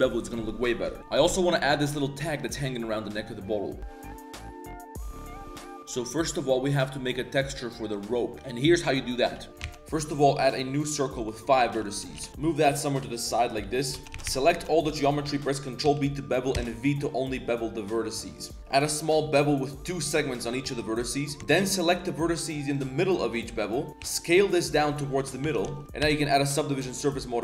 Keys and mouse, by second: 9.1 middle click, 9.4 ctrl+s, 9.5 Tab, 9.5 c, 9.5 x, 9.8 shift+a, 11.2 click, 12.2 g, 13.6-14.6 typing, 13.9 Tab, 14.9 click, 15.8 ctrl+b, 20.4 middle click, 20.6 1, 21.0 right click, 21.9 shift+right click, 23.3 shift+middle click, 24.0 s, 25.4 Tab, 25.6 z, 26.0 ctrl+1, 27.1 drag.